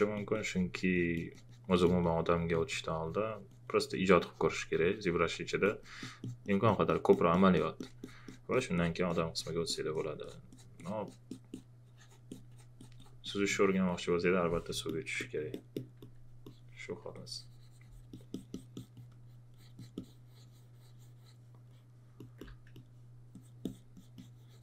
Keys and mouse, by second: 14.8 alt+click, 15.5 alt+click, 22.2 alt+click.